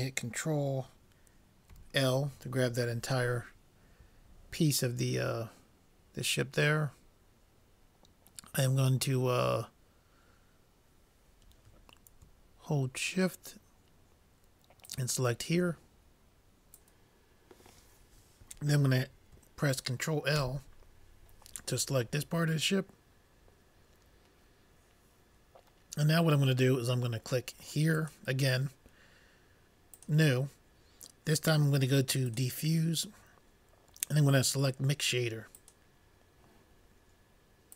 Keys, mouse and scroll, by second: 1.7 ctrl+l, 14.9-17.1 drag, 20.4 ctrl+l, 28.1-29.9 drag, 30.0 click, 30.3-31.9 drag, 32.9-34.4 drag.